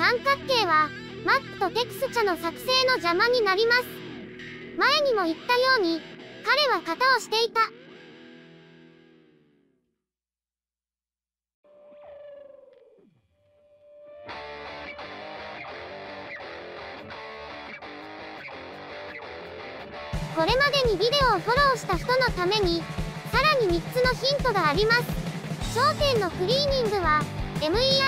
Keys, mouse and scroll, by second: 0.9 middle click, 2.0 middle click, 2.8-4.2 middle drag, 4.5 Tab, 4.7-5.1 scroll down 2, 5.1 right click, 5.3 Tab, 5.8-6.8 middle drag, 6.8 alt+i, 7.7-8.3 middle drag, 8.5 middle click, 9.0 middle click, 9.5 middle click, 10.3 Tab, 10.7 click, 10.9 click, 11.0-12.6 typing, 11.0 middle click, 11.2 click, 11.3 scroll down 1, 11.6 middle click, 11.9 shift+middle click, 12.3 click, 12.8-13.2 scroll up 1, 13.2 right click, 13.5 Tab, 20.2 q, 22.6 shift+middle click, 22.8 scroll up 3, 22.9 shift+middle click, 23.5 Tab, 23.8 right click, 23.9 Tab, 24.1 shift+middle click, 24.6-26.0 typing.